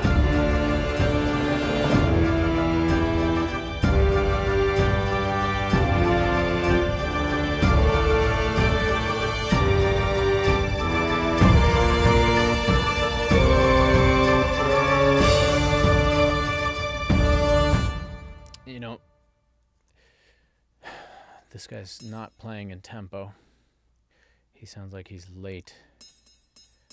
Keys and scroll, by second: 17.7 space, 20.0 ctrl+alt+l.